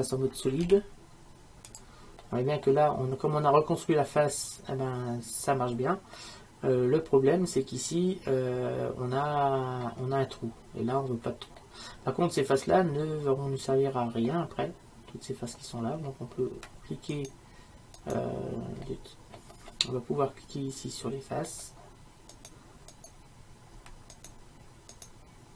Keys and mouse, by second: 0.7 z, 2.3-8.1 middle drag, 9.7-13.7 middle drag, 17.2-20.2 right drag, 20.2 middle click, 20.3 right click, 20.4 middle click, 22.4-25.5 right drag.